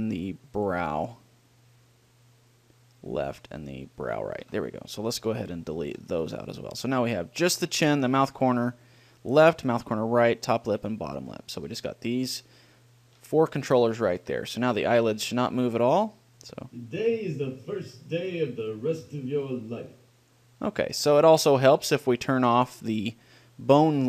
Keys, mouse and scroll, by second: 0.8-2.8 drag, 4.4-6.0 drag, 6.2 Delete, 7.7-9.4 middle drag, 13.6-15.2 drag, 14.4 a, 16.1-17.4 drag, 20.6-22.2 drag, 22.4 middle click, 23.5 click.